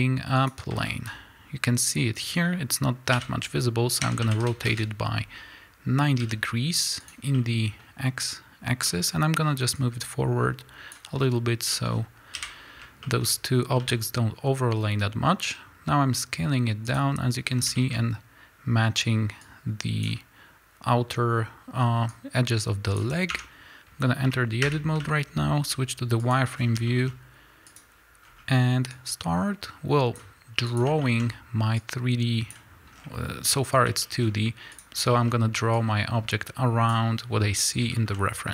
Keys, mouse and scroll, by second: 1.1-3.1 scroll up 2, 3.1 r, 4.8 KP_Enter, 6.2 g, 7.1 click, 7.4-9.8 middle drag, 9.8-11.7 drag, 11.7-17.0 middle drag, 12.3 KP_1, 13.3-13.8 scroll up 2, 13.8 s, 17.0 click, 17.5-19.4 scroll up 4, 17.8-19.4 shift+middle drag, 19.4-26.3 drag, 23.3 Tab, 24.6 2, 25.0 z, 26.6 scroll down 1, 26.9 shift+middle click, 27.7 click, 28.2 scroll up 1, 28.9-30.8 drag, 31.0 shift+middle click, 31.2-31.8 scroll up 2, 31.8-34.0 drag, 33.0-34.0 scroll down 2, 34.0 shift+middle click, 34.2 scroll up 1, 34.7 click, 35.1 shift+middle click, 35.2 shift+scroll up 2, 35.8-37.9 drag, 37.9-38.5 shift+middle drag.